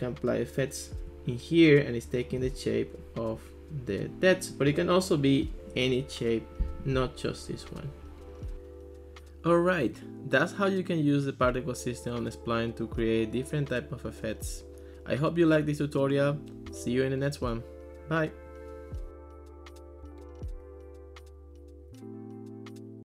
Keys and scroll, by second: 18.5-19.3 typing, 19.5 Return.